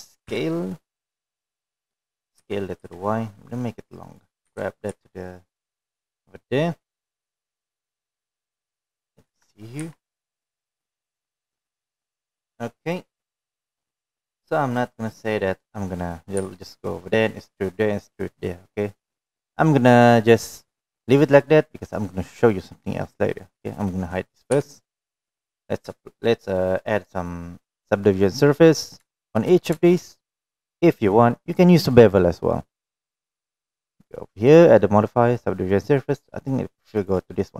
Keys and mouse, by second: 2.4 s, 4.3 s, 6.3 g, 10.2-10.7 middle drag, 11.2 KP_1, 11.7 KP_3, 13.4-14.4 middle drag, 15.1-16.4 middle drag, 16.7 click, 18.3 g, 23.1-23.4 middle drag, 26.5 h, 27.0 click, 27.9-28.2 shift+middle drag, 31.1 shift+middle drag, 32.2 shift+middle click, 36.0-37.5 drag.